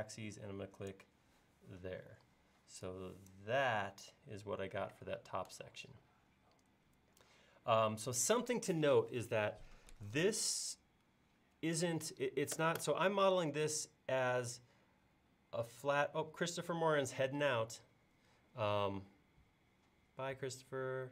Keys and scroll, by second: 2.1 e.